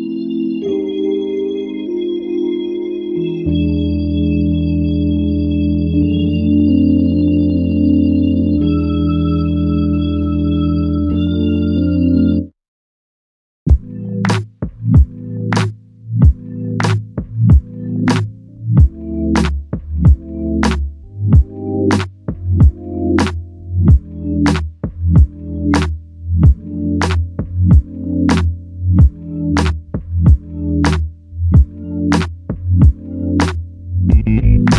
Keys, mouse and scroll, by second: 7.0 alt+click, 10.2 typing, 21.9-22.3 typing, 24.1 typing, 29.5 alt+click.